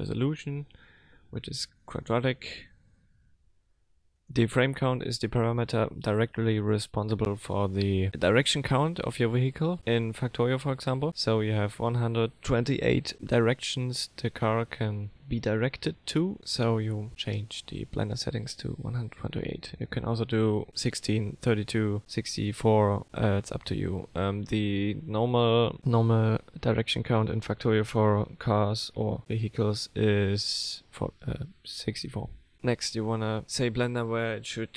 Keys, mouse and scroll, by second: 1.0 KP_0, 1.7 click, 2.4 KP_0, 4.2 click, 33.9 click.